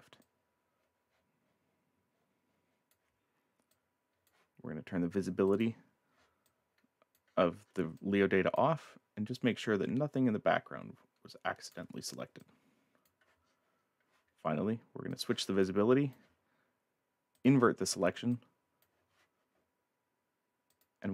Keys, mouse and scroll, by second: 0.2 ctrl+click, 3.7 click, 5.5 click, 6.5 click, 7.5-7.9 scroll down 1, 8.0 click, 9.3 ctrl+alt+click, 12.4 click, 13.5-14.0 scroll up 4, 15.1 click, 15.6 click, 17.3 click, 18.3 click, 20.7 click.